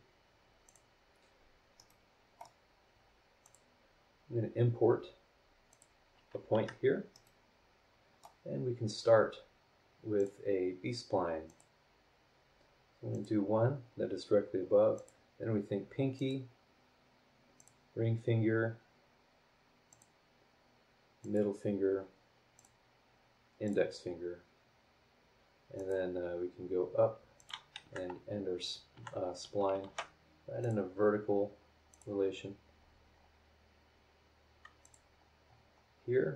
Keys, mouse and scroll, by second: 0.6 click, 1.8 middle click, 1.9 click, 1.9 right click, 3.4 click, 5.7 click, 6.5 Escape, 7.1 middle click, 7.2-8.4 right drag, 10.2 click, 11.4 click, 13.1 click, 14.9 click, 16.1 click, 17.5 click, 17.9-18.2 scroll down 2, 19.9 click, 21.2 click, 22.5 click, 23.6 click, 25.7 click, 27.3 click, 27.8 Escape, 28.9 Escape, 29.8 shift+v, 30.6 click, 31.9 click, 32.3 scroll down 2, 32.8-33.3 scroll up 4, 34.8 click, 35.2-36.0 scroll down 6, 36.2 scroll up 2.